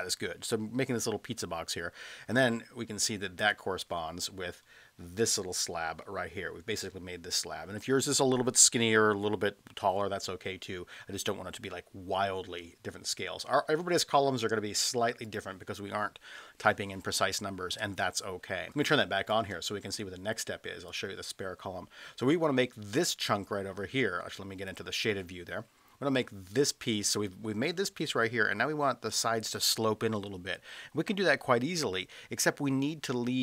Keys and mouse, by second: 3.4 click, 15.2 click, 18.1 space, 18.8 space, 20.9 click, 24.7 click.